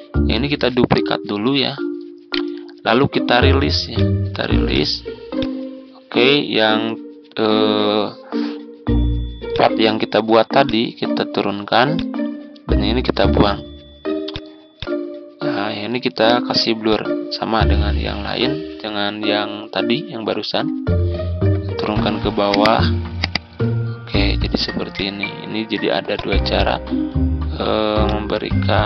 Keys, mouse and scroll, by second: 0.6 ctrl+d, 1.1 click, 2.2 right click, 3.8-11.6 drag, 13.0 Delete, 14.2-19.2 drag, 22.4 click, 27.9 click, 28.7-28.8 drag.